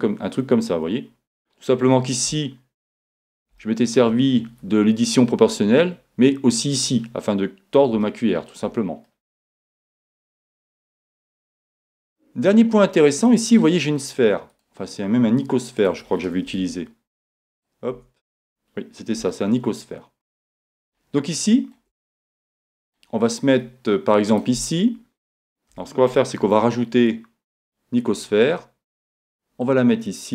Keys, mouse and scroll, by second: 2.1-4.6 middle drag, 5.6-9.1 middle drag, 9.3 middle click, 9.7 middle click, 9.9 middle click, 10.1-13.4 middle drag, 14.6 right click, 15.3-17.2 drag, 16.6 Tab, 17.2 Tab, 17.2-19.3 right drag, 18.0 Tab, 19.4 middle click, 19.6 middle click, 19.9 middle click, 22.1 middle click, 22.3 middle click, 22.5-23.8 middle drag, 24.3-26.4 right drag, 25.7 a, 26.4 shift+a, 29.7-30.3 drag.